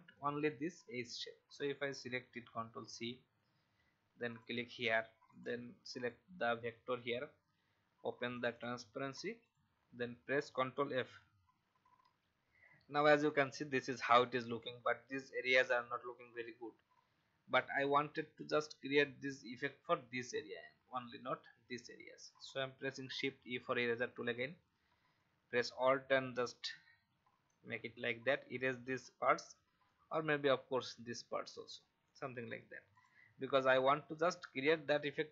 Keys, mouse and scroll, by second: 4.2 click, 11.0 ctrl+f, 23.3 shift+e, 25.1 alt+click, 29.9 alt+click, 32.5 v, 32.9 click, 33.6 alt+scroll up 1.